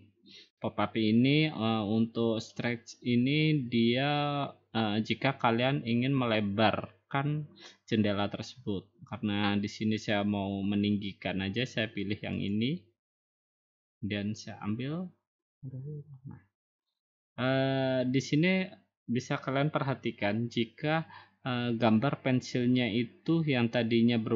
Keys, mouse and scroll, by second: 12.5-13.6 drag.